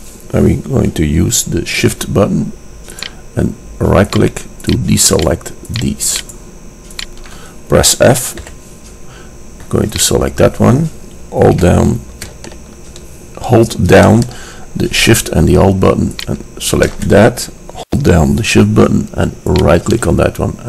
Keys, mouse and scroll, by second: 3.1 click, 3.3 right click, 3.4-8.7 drag, 8.6 f, 8.7 right click, 8.8 drag, 8.9 right drag, 10.1-11.9 right drag, 16.4 click, 19.7-20.6 drag.